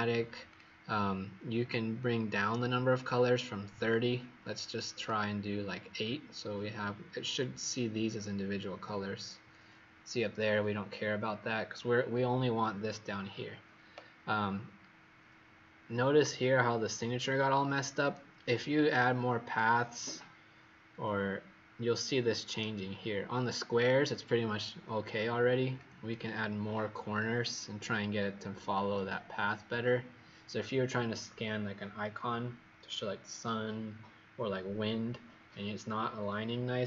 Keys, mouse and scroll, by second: 16.5-17.0 alt+scroll up 4, 18.9 click.